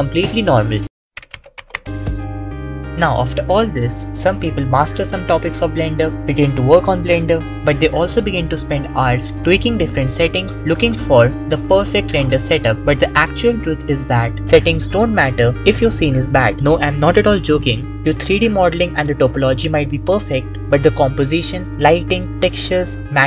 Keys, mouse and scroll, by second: 16.2 x, 16.6 click, 17.3 shift+click, 19.7 g, 21.2 click, 22.3 click, 22.8 click.